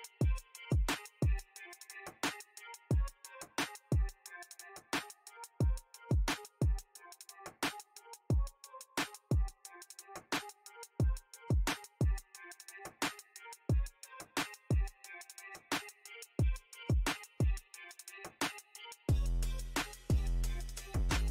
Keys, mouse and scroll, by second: 3.0 f, 3.8-6.8 drag, 7.3-11.4 middle drag, 11.4 ctrl+i, 13.9-17.4 middle drag, 17.4 click, 17.9-21.1 middle drag, 21.1 q.